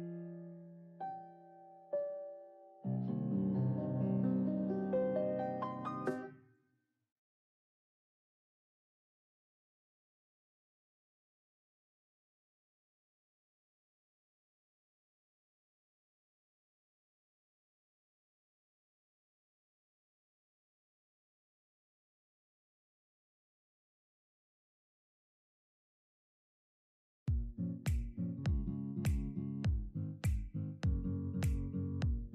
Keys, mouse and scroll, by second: 0.3 shift+middle click, 0.7 scroll up 2, 1.2 KP_1, 2.2 h, 2.8 ctrl+z, 3.0 g, 3.6-4.0 scroll up 2, 4.0 click, 4.9 ctrl+l, 6.1 ctrl+z, 6.7 ctrl+KP_Add, 7.7 x, 8.6 middle click, 9.1-10.1 scroll down 3, 10.1 alt+click, 11.9 f, 12.4 ctrl+l, 13.0 KP_1, 14.8-17.4 typing, 18.4 alt+z, 18.5 middle click, 19.0 KP_3, 19.4 ctrl+KP_1, 19.7 shift+middle click, 20.0-20.4 scroll down 2, 20.4 g, 21.9 scroll up 3, 22.1 shift+middle click, 23.3 click, 23.6 g, 25.8-26.4 scroll up 2, 26.4 alt+z, 26.9 click, 27.5-28.3 scroll down 14, 28.3 middle click, 29.2-29.6 scroll up 10, 29.6-29.9 middle drag, 29.9 alt+click, 31.4 x.